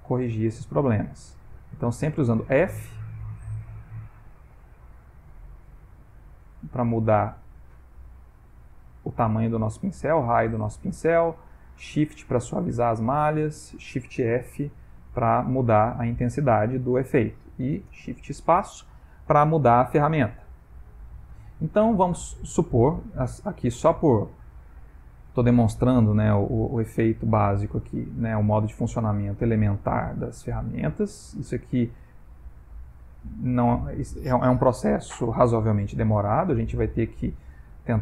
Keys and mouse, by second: 1.1 f, 2.4 click, 3.6 click, 4.6 click, 5.4 click, 6.2 click, 6.8 click, 8.9 click, 10.1 click, 11.2 shift+click, 11.8 shift+click, 12.2 shift+click, 12.6 shift+click, 13.0 shift+click, 14.4 shift+f, 17.9 shift+space, 23.7 click, 24.8 ctrl+middle click, 26.8 right click, 28.0 middle click, 30.8 click, 32.4 click, 33.2 middle click, 34.9 ctrl+middle click, 35.7 middle click, 36.7 ctrl+middle click, 37.8 click.